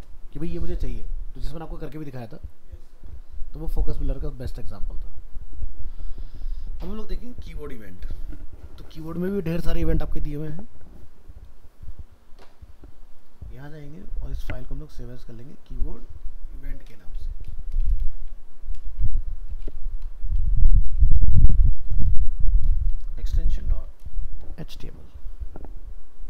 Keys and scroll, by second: 14.3 alt+f, 14.4 alt+释, 18.9 shift+Right.